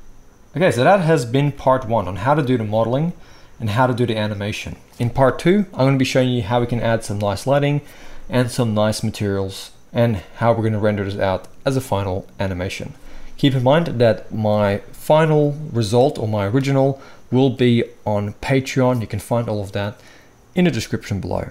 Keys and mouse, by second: 1.5 n, 4.1 right click, 4.3-21.5 drag.